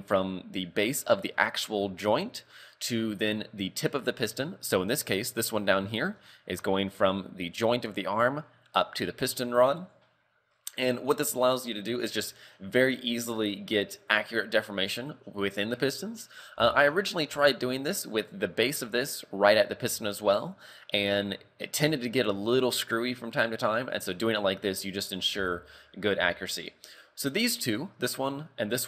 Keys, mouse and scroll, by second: 4.1 shift+middle click, 4.6-5.5 scroll up 2, 5.5 right click, 5.5 scroll up 1, 5.9 shift+middle click, 11.1-15.3 scroll down 3, 15.3 scroll up 2, 16.6-17.3 scroll up 2, 20.7 scroll down 2, 21.3-23.6 scroll down 2, 24.0-25.2 scroll up 2, 25.2 scroll down 3, 25.6 shift+middle click, 25.9 scroll up 2, 26.4 shift+middle click, 27.7 right click.